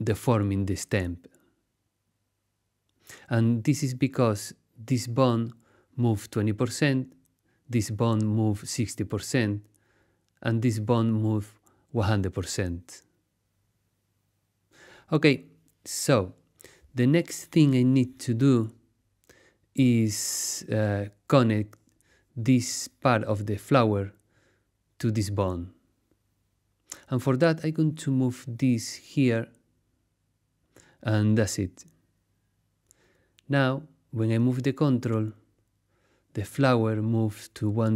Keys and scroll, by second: 13.6 super+z, 19.4 super+z.